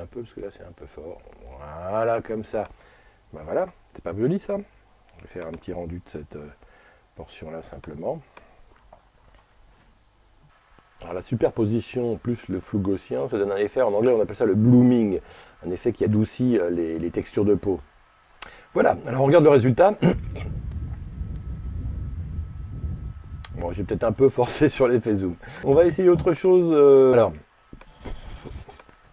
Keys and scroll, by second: 9.0 alt+r.